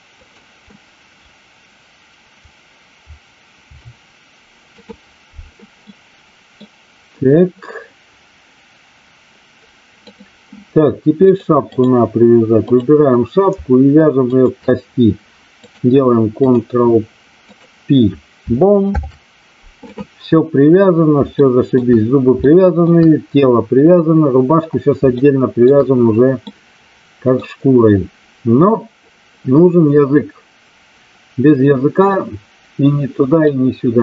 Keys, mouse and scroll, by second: 0.2 click, 3.5 ctrl+p, 5.8-6.5 middle drag, 10.2 click, 11.4 click, 12.7 click, 15.5-16.5 drag, 17.4 click, 21.4 middle drag, 22.4-22.8 shift+middle drag, 25.2-25.5 shift+middle drag, 26.4-27.4 middle drag, 33.4-34.0 middle drag.